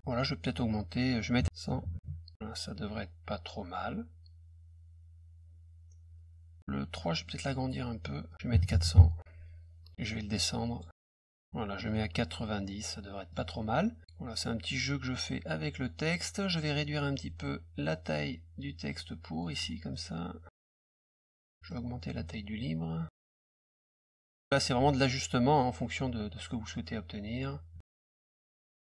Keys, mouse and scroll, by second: 0.0 click, 7.1 click, 7.3 ctrl+a, 10.6 click, 12.0 click, 14.0-15.8 drag, 16.4 click, 18.0-19.4 ctrl+drag, 19.9 click, 20.5 ctrl+click, 21.5 middle click, 22.3-23.9 ctrl+drag, 24.0 click, 24.6-27.4 ctrl+drag, 27.8 ctrl+click, 28.3 middle click.